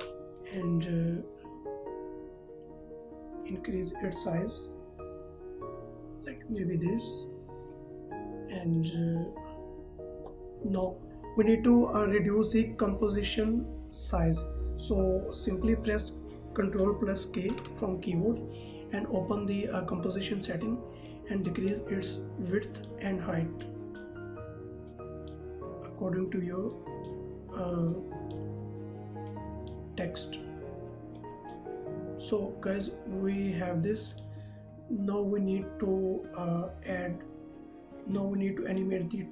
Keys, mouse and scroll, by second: 0.0 ctrl+a, 4.4 click, 16.9 ctrl+Num_Lock, 17.6 ctrl+k, 21.1 click, 34.2 click.